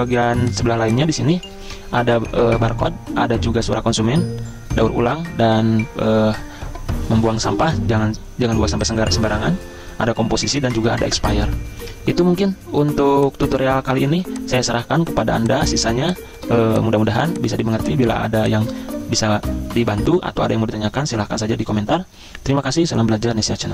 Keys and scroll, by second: 14.1 z, 17.8 z, 19.1 v.